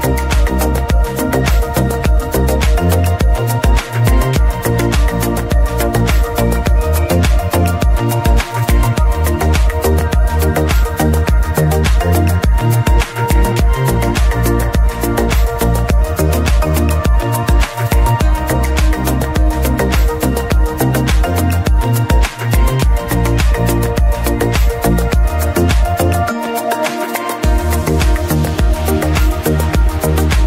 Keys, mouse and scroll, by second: 2.0 click, 2.1 Tab, 4.2 click, 4.9 Tab, 5.4 alt+a, 5.8-6.3 scroll down 1, 7.2-8.7 scroll up 4, 7.4 middle click, 8.7-9.2 scroll up 1, 9.2-11.1 scroll up 1, 11.1-12.8 scroll up 1, 12.8-14.2 scroll up 1, 14.2-16.7 scroll up 1, 16.7-25.4 drag.